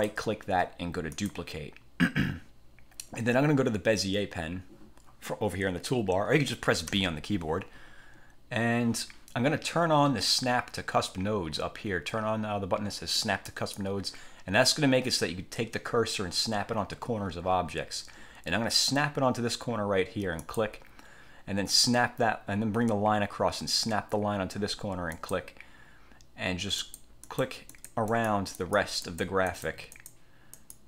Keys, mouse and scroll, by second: 0.0 click, 1.2 click, 7.0 b, 13.6 click, 20.5 click, 25.3 click, 26.9 click, 27.4 click, 27.9 click, 30.7 click.